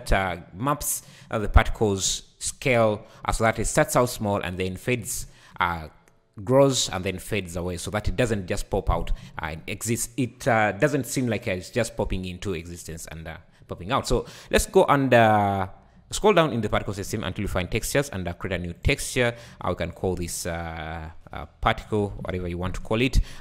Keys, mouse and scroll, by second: 12.8-14.1 scroll down 5, 14.1 scroll down 6, 14.8-15.7 scroll down 5, 17.9-18.8 scroll down 1, 18.8-19.3 drag, 19.3-19.9 scroll down 1, 19.9-23.0 drag.